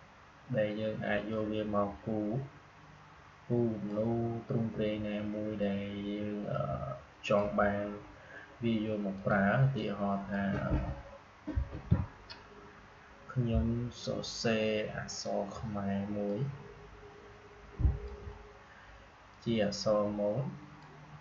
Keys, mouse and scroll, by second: 1.2-11.8 drag, 11.8 Delete, 15.0-21.2 drag.